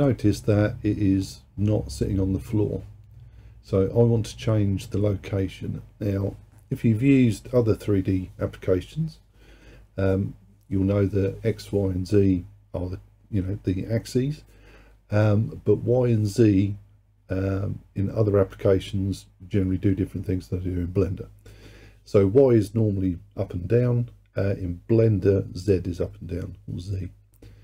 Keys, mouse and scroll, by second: 0.1-3.1 middle drag.